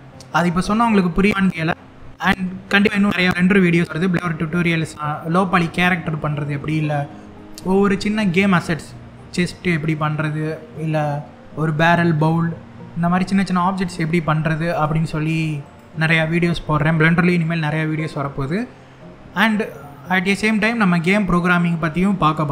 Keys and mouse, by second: 16.8-17.9 drag.